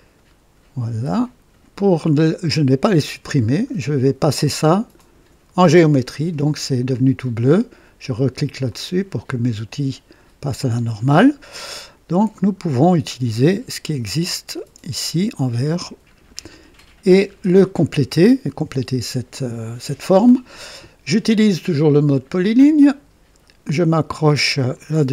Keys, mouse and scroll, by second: 1.1 click, 2.3-2.6 scroll down 2, 4.9 click, 8.6 click, 11.0-11.3 scroll down 1, 12.2-12.9 right drag, 13.3-14.7 right drag, 15.9-16.3 scroll up 1, 16.4-17.0 right drag, 17.2 scroll up 2, 17.7-18.3 right drag, 22.7 click, 24.6 click.